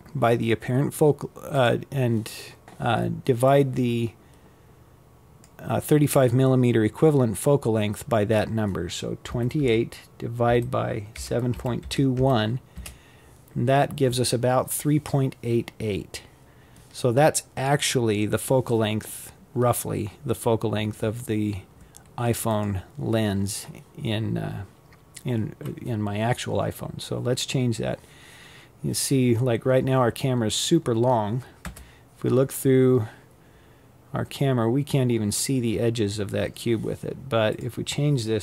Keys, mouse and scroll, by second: 26.8-27.7 scroll down 5, 27.7-28.3 scroll up 3, 28.3 scroll down 2, 29.3 KP_0, 31.4-32.7 scroll down 13, 32.7-35.2 scroll up 7, 35.2-36.9 drag, 36.9 KP_8.